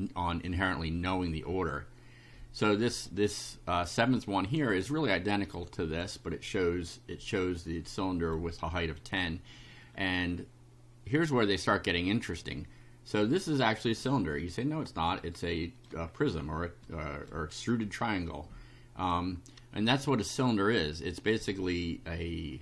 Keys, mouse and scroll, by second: 3.9 click, 5.5 click, 6.3 scroll down 1, 6.9 shift+right click, 7.6 shift+right click, 9.9 scroll down 1, 11.7 click, 13.3 shift+right click, 14.4 shift+click, 15.3 shift+right click, 16.1 shift+scroll up 1, 16.9 shift+right click, 17.1 shift+middle click, 18.5 middle click, 18.7 right click.